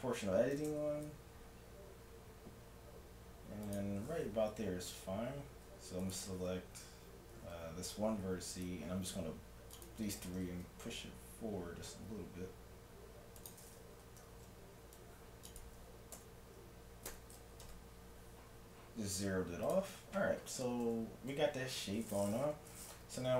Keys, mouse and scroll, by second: 0.6 g, 4.7 a, 6.1-7.9 right drag, 6.6 a, 7.5 c, 7.9 middle click, 9.8-11.4 drag, 10.3 g, 11.4 click, 14.0 a, 14.3 c, 15.6-16.7 drag, 16.2 s, 20.9 a, 23.0 z.